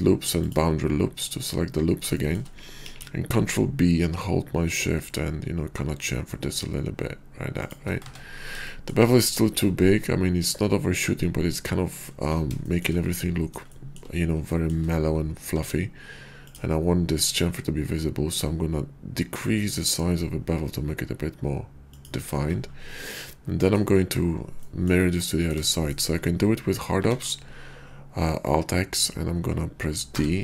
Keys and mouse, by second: 2.8 ctrl+b, 7.6 shift+click, 7.9 Tab, 9.1 shift+click, 9.7-12.1 drag, 10.8 q, 12.6 shift+middle drag, 13.7-14.0 shift+middle drag, 15.3 q, 21.9 shift+click, 23.0-23.8 middle drag, 24.6 middle drag, 25.2 middle drag, 27.1 alt+x.